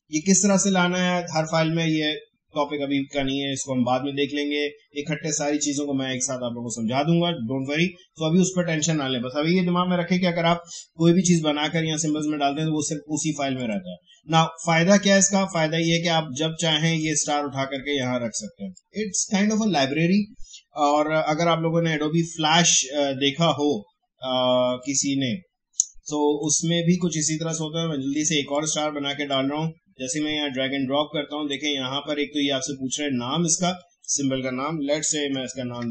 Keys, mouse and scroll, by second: 0.2 click, 13.6-21.4 drag, 21.4 Delete, 24.8-33.8 drag.